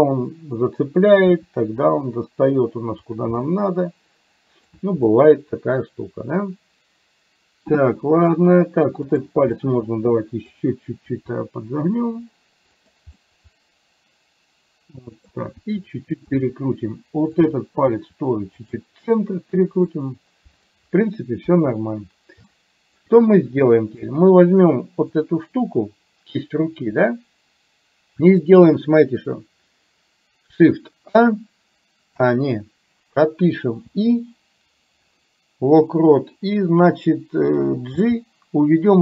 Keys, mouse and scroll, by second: 1.3 r, 3.4-4.6 middle drag, 5.0-8.3 middle drag, 9.1 click, 9.5-10.5 middle drag, 11.1 r, 13.1-15.4 middle drag, 15.6 r, 17.4 click, 17.9 r, 19.9 middle click, 21.4 KP_1, 22.5 middle click, 24.1-25.3 drag, 33.9 i, 38.0 g.